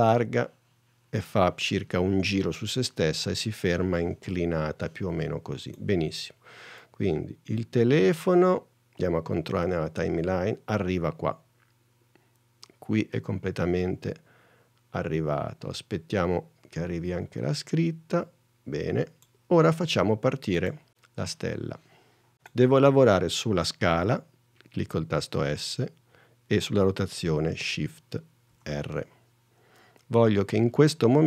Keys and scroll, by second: 25.4 s, 28.6 shift+r.